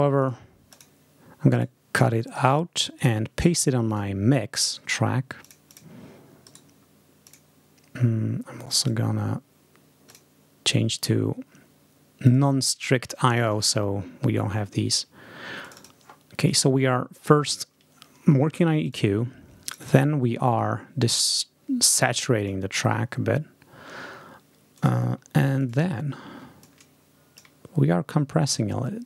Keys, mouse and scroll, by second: 0.1 click, 0.6 click, 1.4 right click, 2.1 click, 2.9 click, 3.2 scroll up 2, 3.8 click, 4.5 right click, 5.3 click, 6.3 right click, 7.1 click, 8.7 click, 10.0 click, 12.1 click, 13.2 click, 15.5 click, 18.7 click, 19.6 click, 21.9 click, 24.6 click, 25.5 click, 26.5 click, 28.9 click.